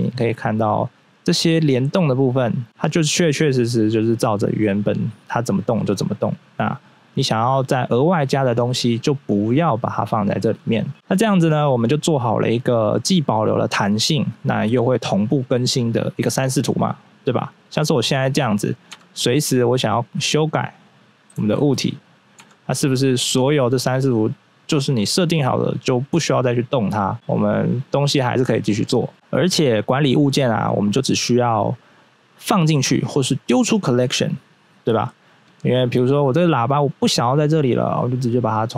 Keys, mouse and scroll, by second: 1.5 click, 1.9 right click, 3.8 click, 4.1 click, 6.6 click, 7.2 click, 8.8 scroll up 1, 10.3 click, 10.9 scroll down 1, 14.5 right click, 15.0 right click, 17.8 scroll up 1, 18.9 Tab, 19.3 right click, 20.3 click, 21.3 ctrl+z, 22.4 Tab, 26.7 scroll down 1, 27.1 right click, 27.2 right click, 27.8 right click, 28.2 scroll up 1, 34.8 scroll up 1, 35.8 right click, 38.1 click.